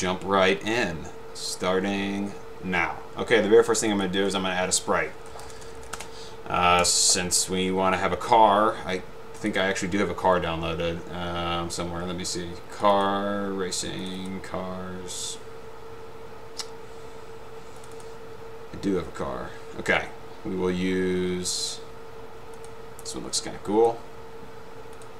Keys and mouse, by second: 3.9 click, 4.0 click, 5.6 p, 6.0 Return, 6.9 click, 13.0 click, 14.2 click, 17.9 click, 18.1 click, 22.8 click, 23.4 click.